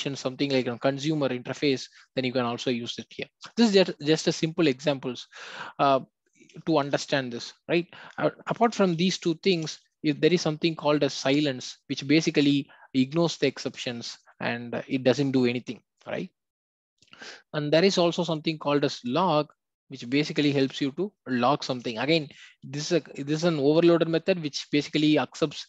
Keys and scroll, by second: 9.5 Return, 13.2 Return.